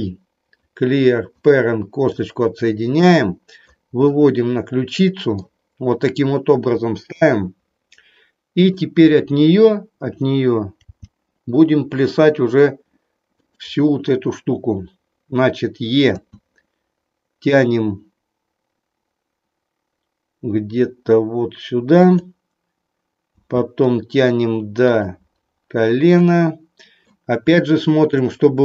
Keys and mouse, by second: 2.1-3.7 drag, 4.2-5.3 middle drag, 7.1 KP_3, 8.4 click, 10.8 g, 16.2 e, 21.9 click, 23.3 e, 24.9 click, 26.3 middle click, 27.6 shift+middle click.